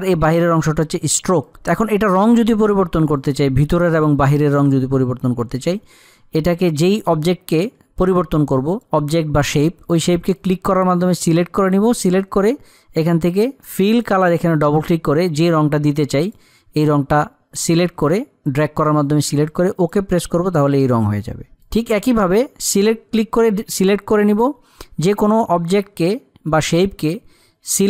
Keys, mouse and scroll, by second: 1.2 click, 8.5 click, 14.2-20.2 drag, 20.2 click, 22.0 click.